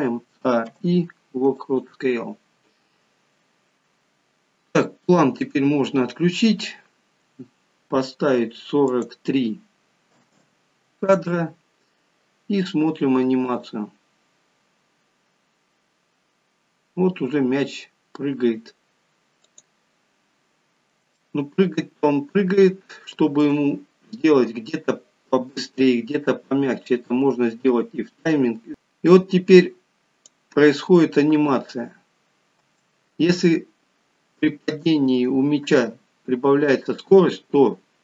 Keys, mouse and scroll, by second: 0.3 a, 2.4 scroll down 5, 3.0 scroll up 2, 5.1 click, 8.9 click, 13.4 click, 19.5 click, 20.4-21.0 scroll up 2, 21.2 shift+middle click, 23.8 scroll down 3, 28.8 click, 28.8 scroll up 2, 31.4 space.